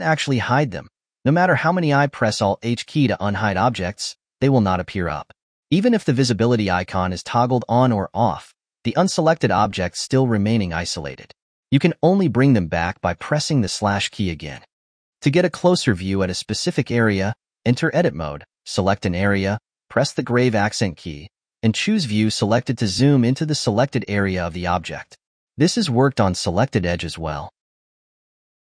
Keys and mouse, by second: 0.6 alt+h, 0.8 alt+h, 1.0 alt+h, 1.2 alt+h, 1.4 alt+h, 1.6 alt+h, 1.8 alt+h, 2.0 alt+h, 2.2 alt+h, 2.4 alt+h, 2.6 alt+h, 2.8 alt+h, 3.0 alt+h, 3.2 alt+h, 3.4 alt+h, 3.6 alt+h, 6.3-12.5 drag, 13.7 /, 17.2 click, 18.2 Tab, 18.9 click, 20.4 `, 25.1 click, 26.3 `.